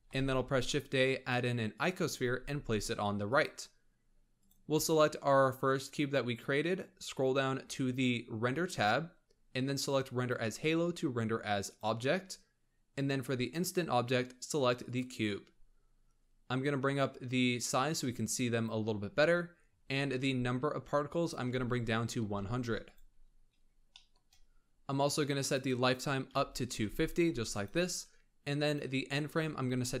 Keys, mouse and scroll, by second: 0.1 shift+a, 2.3 g, 3.7-4.3 scroll down 1, 4.3 click, 4.8-6.7 scroll up 1, 6.7-8.2 scroll down 18, 8.7-9.1 drag, 9.1-10.1 scroll down 3, 10.1-13.2 drag, 13.3 click, 15.5-15.8 scroll up 3, 16.9-19.1 drag, 19.1-21.1 scroll up 18, 21.1-22.3 drag, 22.3 0, 23.3 scroll down 2, 23.9-25.4 shift+middle drag, 25.4-27.6 drag, 28.6-30.0 drag.